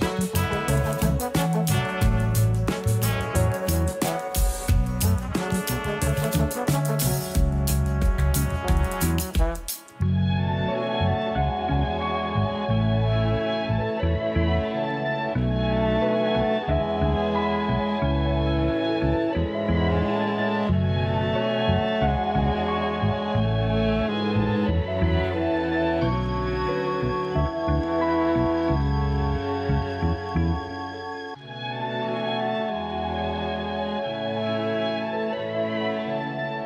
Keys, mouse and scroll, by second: 0.0-0.6 scroll up 7, 0.6 g, 2.0-3.2 scroll down 10, 2.2 a, 3.2-3.7 shift+middle drag, 3.7-4.2 scroll up 3, 4.2-5.4 shift+middle drag, 5.4-5.8 scroll up 2, 5.8-6.3 shift+middle drag, 6.3-6.7 scroll up 1, 6.7-7.3 shift+middle drag, 7.3 click, 7.8 shift+click, 8.2-8.7 scroll down 2, 8.7-10.1 shift+middle drag, 10.1 shift+click, 10.9 shift+click, 12.2 s, 15.9 a, 16.1 a, 16.4 scroll down 1, 16.7-17.2 shift+middle drag, 17.2 scroll up 2, 17.4 a, 17.6 a, 18.2-18.7 shift+middle drag, 18.7-19.2 scroll down 2, 19.2 KP_1, 20.2 a, 20.4 a, 24.0 ctrl+3, 24.5 right click, 25.2-25.9 scroll up 1, 26.0 g, 27.7-28.4 scroll up 2, 28.4 Tab, 28.9 s, 30.3-30.7 scroll up 1, 30.7-32.7 shift+middle drag, 32.7 shift+d, 33.4 g, 35.0 s, 36.4 scroll up 6.